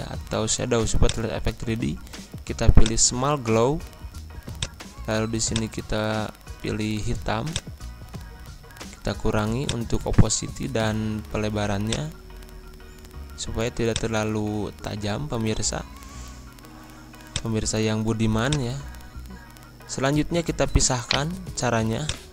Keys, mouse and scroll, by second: 17.3 click, 21.0 right click, 22.0 click.